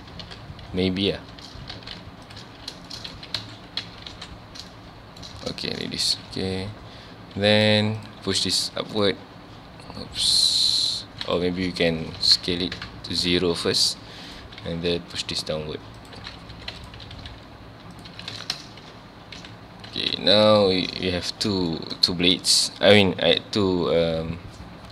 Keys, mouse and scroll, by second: 0.2 ctrl+x, 1.0 alt+click, 1.4 ctrl+x, 2.3 alt+click, 2.5 ctrl+x, 2.9 shift+middle click, 3.3 Tab, 3.4 alt+a, 3.8 Tab, 4.1-4.6 scroll down 3, 4.1 alt+a, 4.7-5.3 shift+middle drag, 5.3 scroll up 1, 5.7 shift+middle click, 5.9-6.3 scroll up 2, 6.2 Tab, 6.6 1, 7.4 z, 8.0 click, 8.4 g, 11.5 2, 11.8 alt+click, 12.1 s, 12.8 KP_Enter, 13.4 1, 13.7 click, 14.3 click, 14.6 g, 16.1 click, 16.5 2, 16.8 alt+click, 17.1 g, 18.0 click, 18.1 Tab, 18.3 alt+a, 19.9 alt+a, 20.2 scroll down 1, 20.6 shift+middle click, 21.1 ctrl+s, 21.7-22.6 shift+middle drag, 22.6 scroll up 1.